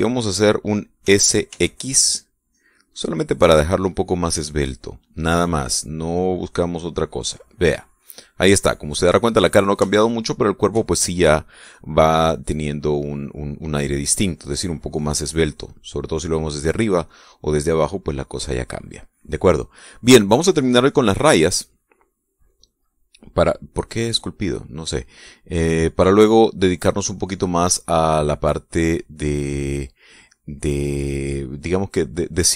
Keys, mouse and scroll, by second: 1.5 s, 2.0 x, 5.2 click, 5.6-8.5 middle drag, 8.6-9.7 middle drag, 9.8 middle click, 10.4 shift+middle click, 11.0 shift+middle click, 15.2-19.9 drag, 22.0 click, 23.0 click, 24.3 click, 26.3 click.